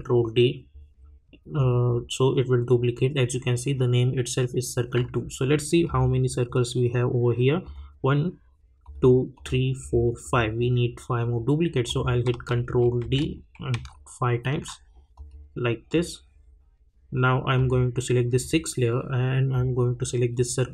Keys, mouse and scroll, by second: 5.8 click, 12.3 ctrl+d, 15.1 click, 17.5 click.